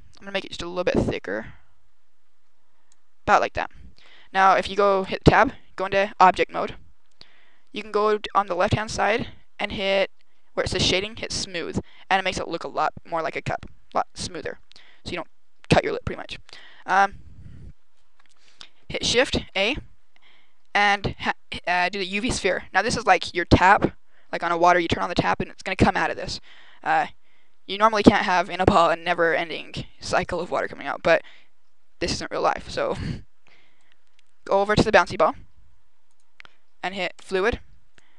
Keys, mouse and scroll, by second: 0.2 click, 4.9 Tab, 7.6 click, 11.1 click, 14.5 scroll down 1, 16.8 KP_0, 19.3 shift+a, 22.5 g, 23.4 click, 33.7 middle click, 36.0 click, 37.0 click, 37.8 click.